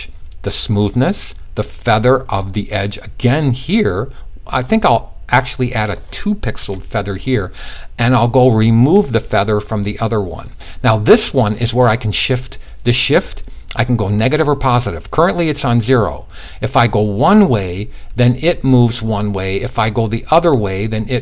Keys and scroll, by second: 6.1 2.